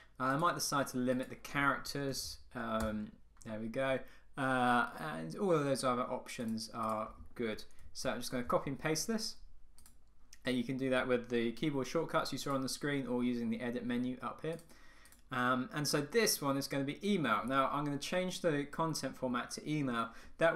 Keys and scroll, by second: 2.9 Return, 8.0 super+c, 8.6 super+v.